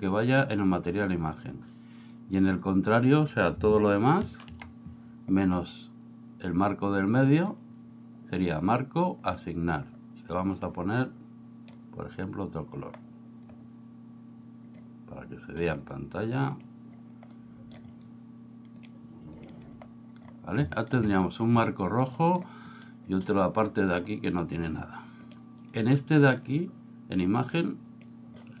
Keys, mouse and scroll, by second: 4.2 ctrl+i, 5.6-7.3 middle drag, 8.3 click, 9.3 click, 10.4 click, 14.8 click, 17.3 middle click, 18.9 click, 20.8 shift+middle click, 21.2 middle drag, 22.2 middle click, 22.8 right click, 25.3 click, 27.6-28.6 drag.